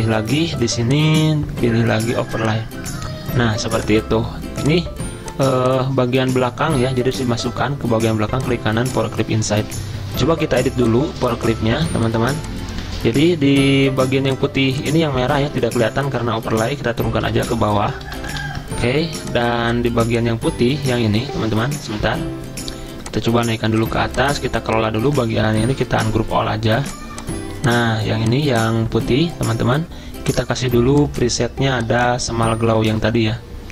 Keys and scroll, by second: 6.2 ctrl+z, 13.1 ctrl+z, 15.6 ctrl+z, 17.3 ctrl+End, 17.5 ctrl+End, 17.8 ctrl+End, 20.7 ctrl+z, 23.4 ctrl+z, 25.2 ctrl+z.